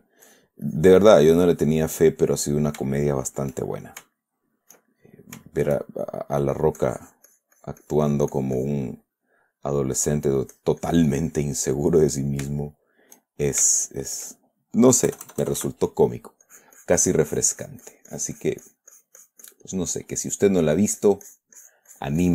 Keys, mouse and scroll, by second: 0.7 click, 1.1 click, 1.6-3.2 drag, 2.7 right click, 3.3 shift+middle click, 5.1 shift+middle click, 5.3 shift+middle click, 5.9-6.9 shift+middle drag, 7.2-9.3 drag, 9.3-10.8 middle drag, 10.9 click, 11.9 click, 12.5 click, 13.0 shift+click, 15.5 KP_Add, 16.8-20.1 drag, 20.2 middle click, 21.3-22.3 drag.